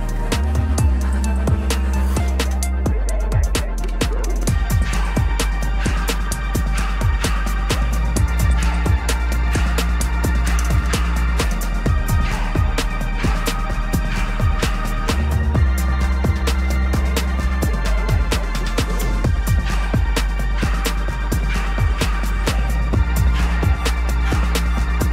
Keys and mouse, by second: 0.1 click, 2.2-3.8 drag, 4.1 middle click, 5.1-6.0 shift+middle drag, 7.9 click, 9.1 shift+middle click, 10.8-12.9 drag, 13.5-14.1 middle drag, 14.2 ctrl+s, 14.6 click, 15.0 Tab, 15.8-16.6 middle drag, 16.8 shift+middle drag, 18.1 ctrl+z, 18.2 click, 18.9 ctrl+click, 20.7-21.1 middle drag, 21.6 shift+click, 22.0 shift+click, 22.4 shift+click, 22.7 shift+drag, 23.0-23.6 middle drag, 23.8 ctrl+j, 24.3 click, 24.6-25.1 middle drag.